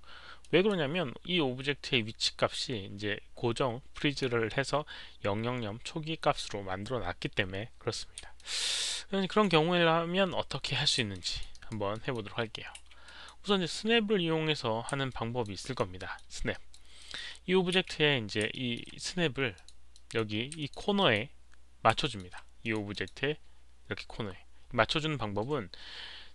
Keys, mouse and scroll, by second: 0.4 alt+drag, 0.9 z, 3.9 alt+click, 3.9 z, 8.3-9.4 alt+drag, 11.1 alt+click, 11.5 alt+right click, 11.9 alt+middle click, 12.7 q, 13.0 alt+drag, 14.7 alt+middle click, 14.7 alt+right click, 14.7 q, 15.0-15.4 alt+drag, 15.5 alt+right click, 15.9 alt+middle click, 16.5 alt+right drag, 16.7 alt+click, 16.7 q, 16.9 alt+middle click, 17.7 w, 18.5 alt+middle drag, 19.5 alt+click, 19.9 alt+drag, 20.5 alt+click, 20.9 alt+drag, 22.0 alt+middle drag, 22.1 alt+right click, 22.1 w, 22.6 alt+click, 22.9 click, 23.0 alt+middle click, 23.0 w.